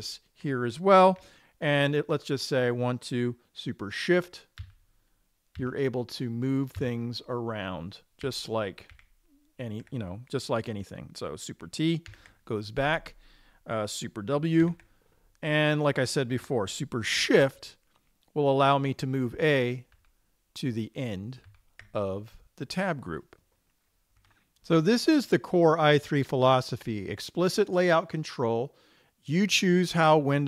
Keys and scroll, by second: 5.1 shift+super+Down, 6.0 shift+super+Down, 7.3 shift+super+Down, 8.7 shift+super+Up, 9.4 shift+super+Up, 12.6 super+t, 15.3 super+w, 20.4 shift+super+Right, 21.9 shift+super+Right.